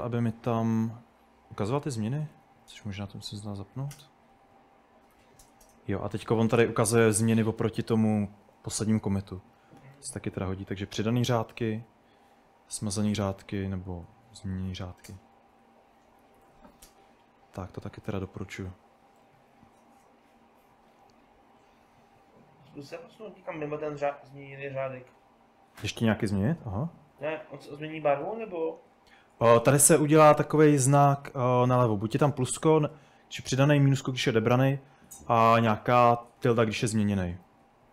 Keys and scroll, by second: 1.5-3.2 typing, 3.4 Up, 3.6 Down, 4.0 Return, 4.3-16.9 typing, 19.3-20.0 typing, 25.8-29.2 typing, 35.0 Escape, 35.3-36.5 typing, 37.0 Escape, 37.5 h.